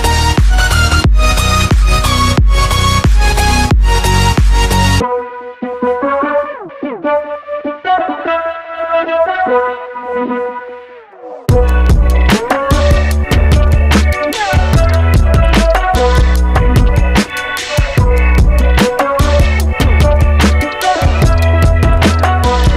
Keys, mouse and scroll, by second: 0.6-3.0 drag, 3.6-4.0 scroll down 4, 4.0-7.7 middle drag, 9.0 click, 9.7 KP_7, 10.2-15.2 scroll up 5.